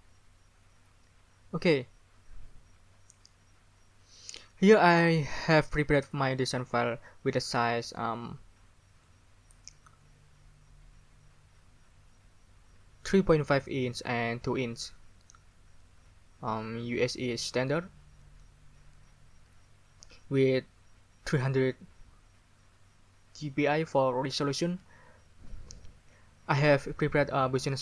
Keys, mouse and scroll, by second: 9.0 scroll up 2.